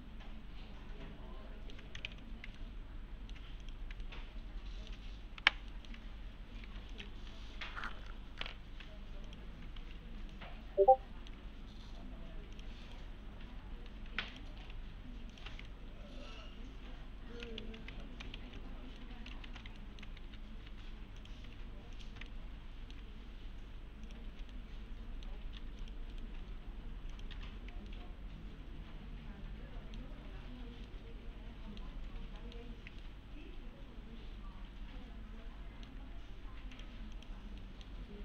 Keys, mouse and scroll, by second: 0.0-1.8 alt+middle click, 2.1 ctrl+z, 2.6-3.5 alt+middle click, 3.6 ctrl+click, 4.0-5.0 alt+middle click, 6.7 2, 6.9 click, 9.3 click, 9.8 alt+1, 10.3-11.6 alt+middle click, 12.5 click, 12.9 right click, 13.8-14.1 typing, 14.3 click, 15.3 ctrl+click, 15.7-17.6 alt+middle click, 17.6 ctrl+z, 18.0 alt+middle click, 18.4 ctrl+z, 19.0-19.6 alt+middle click, 19.5 ctrl+z, 19.8 ctrl+alt+middle click, 20.3-20.7 typing, 21.2 click, 22.0 ctrl+click, 22.3-23.2 alt+middle click, 24.1 click, 24.5-25.5 alt+middle click, 25.6 3, 25.8 click, 26.1 right click, 27.1 click, 27.3 3, 27.9-30.1 alt+middle click, 30.5-30.9 scroll down 1, 30.9-32.1 middle click, 32.0 scroll up 1, 32.4 middle click, 32.8 scroll down 1, 33.0-34.9 alt+middle click, 36.0 1, 36.2-36.7 scroll up 1, 36.7 click, 37.6 middle click, 37.9-38.2 scroll down 1.